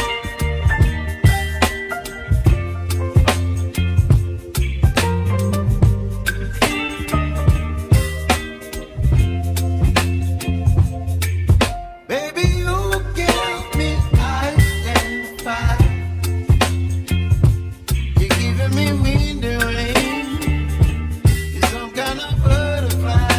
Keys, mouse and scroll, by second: 0.3 click, 0.8-3.3 middle drag, 6.6 alt+h, 7.4-8.2 middle drag, 8.2 click, 8.5-10.4 scroll down 2, 11.0-15.0 middle drag, 17.8-18.3 scroll up 3, 18.5-20.7 shift+middle drag, 20.7 click, 21.6 Tab, 21.9 click, 23.0 3, 23.1 click.